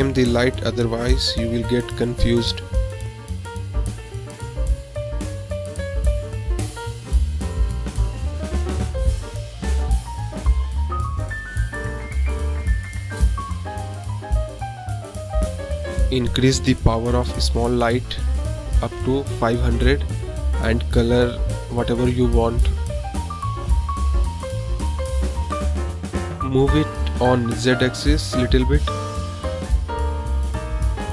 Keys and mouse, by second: 0.3 click, 0.4-2.3 drag, 2.3 BackSpace, 2.4 BackSpace, 3.0 click, 3.4 click, 3.7-7.4 drag, 10.2-10.6 middle drag, 10.7 middle click, 11.2-11.8 drag, 11.8 middle click, 13.3 click, 15.4 click, 16.6 click, 17.3-19.0 drag, 17.9 KP_0, 19.7 drag, 26.5-31.1 shift+drag.